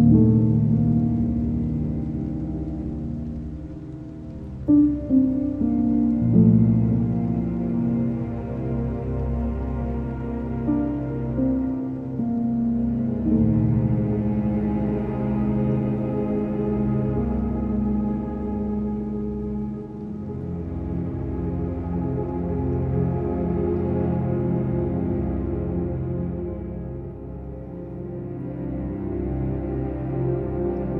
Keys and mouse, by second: 1.1 s, 3.3 middle click, 4.9 g, 5.3 x, 6.1 click, 6.7 KP_3, 8.1 g, 9.1 click, 9.8 o, 11.4 g, 14.6 g, 14.9 x, 17.5 click, 18.2 KP_3, 18.9 z, 19.9 alt+z, 20.7 s, 22.0 g, 27.4 click, 29.4 s, 30.1 click, 30.5 g.